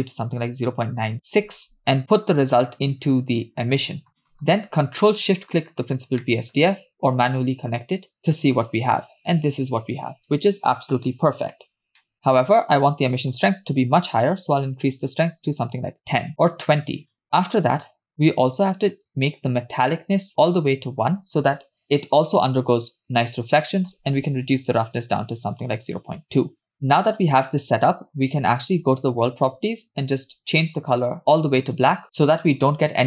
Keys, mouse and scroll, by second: 2.0-3.8 drag, 4.2 middle click, 5.4 ctrl+shift+drag, 5.9-6.2 scroll down 2, 6.2 middle click, 8.2 click, 12.0 middle click, 12.2-13.1 scroll up 2, 13.1 scroll up 1, 13.2-15.3 drag, 17.0 scroll down 2, 17.1 middle click, 18.1-19.0 scroll up 3, 19.0-20.7 drag, 23.8-25.8 drag, 28.9 click, 30.1 click.